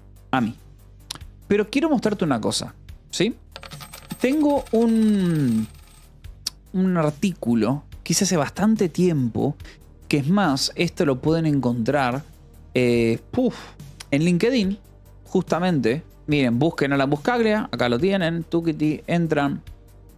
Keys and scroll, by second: 3.8 h, 5.2 j, 6.5 k, 11.2 ctrl+t, 14.2-17.6 typing, 20.0 j.